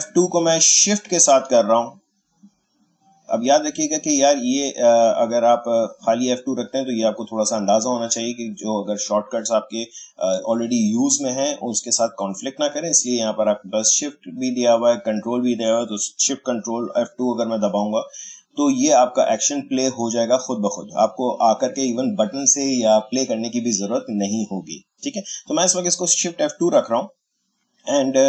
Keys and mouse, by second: 0.7 click, 5.7 click, 13.8 click, 26.6 click.